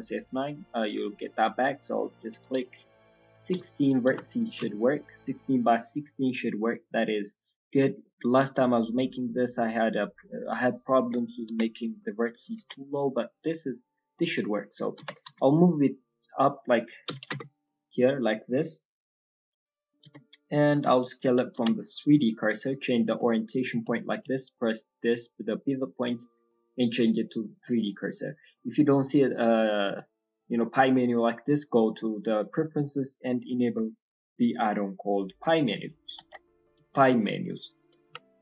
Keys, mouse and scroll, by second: 7.7-8.3 scroll down 3, 8.0 middle click, 8.5 click, 9.2 right click, 11.0-11.9 scroll up 4, 11.4 KP_1, 12.3 scroll down 2, 12.5 Tab, 12.5-14.4 scroll down 2, 14.9 g.